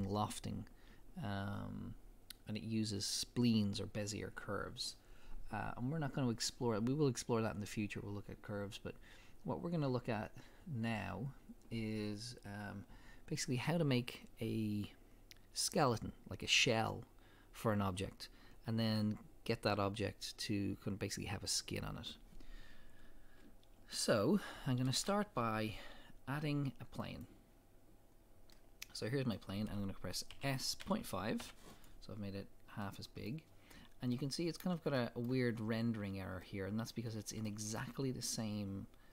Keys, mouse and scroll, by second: 22.8 middle click, 22.8-23.3 scroll up 2, 25.0 shift+a, 26.0-28.0 middle drag, 28.0 scroll down 2, 28.1-29.2 middle drag, 30.3 s, 31.2 middle click, 31.9 click, 32.2-32.8 scroll up 2, 32.8-38.0 middle drag, 35.4-36.4 scroll up 2, 37.2 scroll down 2, 38.0 scroll up 2.